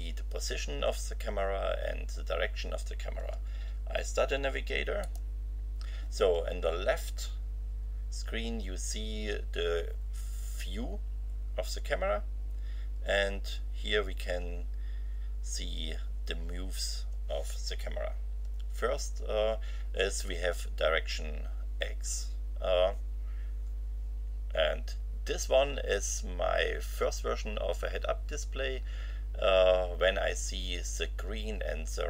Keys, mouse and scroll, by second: 5.0 click.